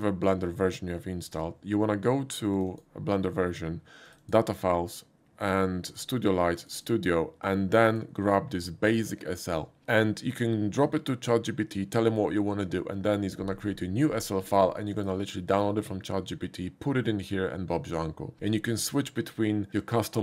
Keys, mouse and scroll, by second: 2.5 click, 2.7 click, 4.1 click, 4.2 click, 5.9 click, 6.0 click, 6.6 click, 6.7 click, 7.9 click, 15.0 click.